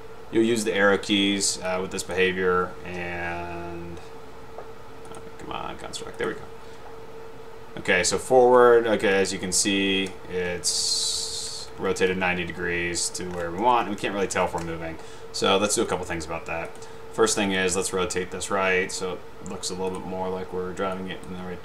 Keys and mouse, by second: 1.9 click, 6.3 click, 6.9 Up, 9.7 Down, 10.9 Down, 11.0 Down, 11.4 Down, 11.9 Up, 12.2 Right, 12.7 Up, 13.5 Left, 13.7 Down, 13.9 Left, 14.1 Right, 14.3 Up, 14.5 Left, 14.5 Down, 16.0 click, 16.8 drag, 17.5 click, 21.1 click.